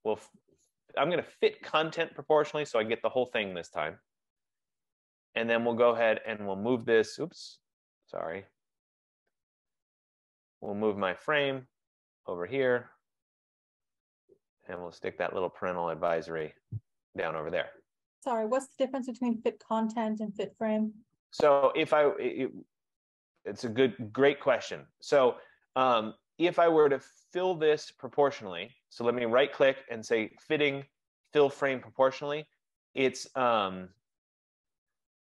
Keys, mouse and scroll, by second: 2.2 click, 5.0 click, 9.0 click, 9.7 click, 10.4 click, 12.8 click, 23.3 click, 24.6 click, 29.2 right click, 32.2 click.